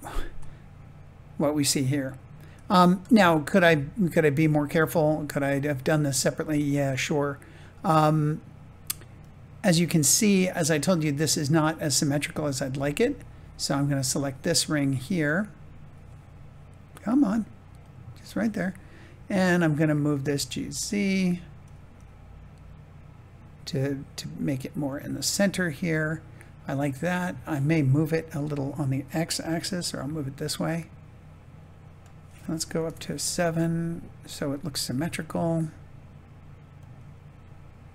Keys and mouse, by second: 3.0 shift+middle click, 3.6-4.7 middle drag, 5.1 middle click, 6.6-8.1 middle drag, 9.1 click, 10.1 middle click, 11.0 shift+middle click, 12.4 Tab, 13.8 alt+click, 20.1 g, 20.4 z, 24.9 click, 25.4-27.2 middle drag, 30.0 g, 31.9 click, 32.7 KP_7, 34.8 g.